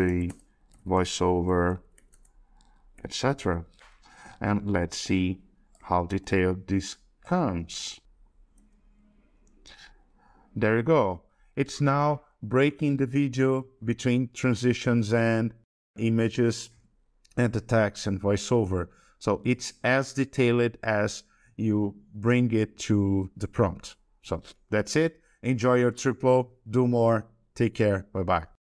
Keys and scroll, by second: 6.0 ctrl+c, 8.5 ctrl+v.